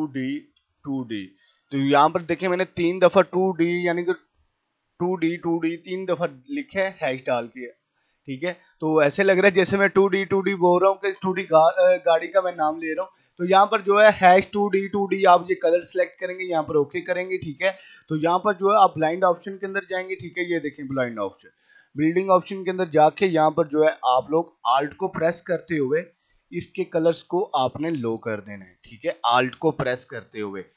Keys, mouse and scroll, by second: 0.0-1.3 typing, 2.1-16.5 drag, 18.7 right click, 21.6 click, 26.8-30.7 alt+drag.